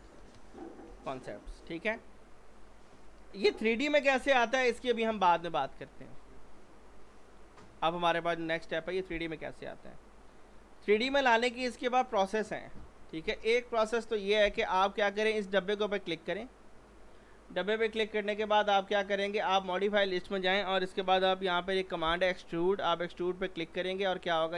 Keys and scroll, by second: 0.9 BackSpace, 4.2 p, 5.1 z, 21.0 e, 21.3 x.